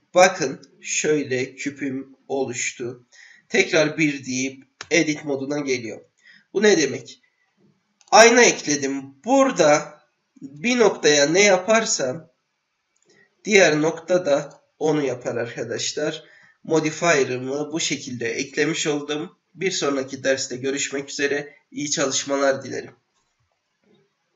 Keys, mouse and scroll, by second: 0.4-2.1 middle drag, 3.5 KP_1, 4.8 Tab, 6.9-8.1 drag, 10.5 g, 15.8 ctrl+z.